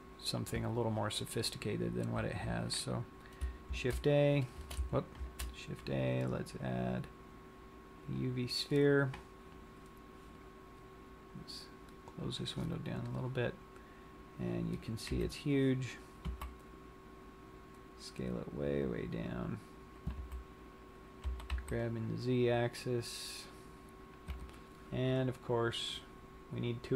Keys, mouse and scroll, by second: 18.4 s, 19.8 click, 20.5 z, 21.7 g, 24.6 Tab, 24.6 click, 26.1 click.